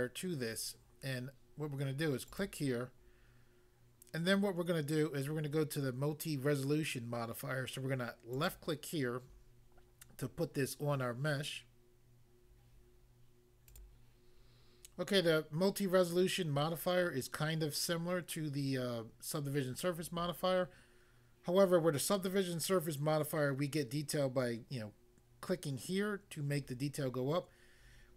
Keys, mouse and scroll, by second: 2.2 click, 2.4 click, 8.4 click, 8.5 click, 9.6 click, 13.7 click, 13.8 click.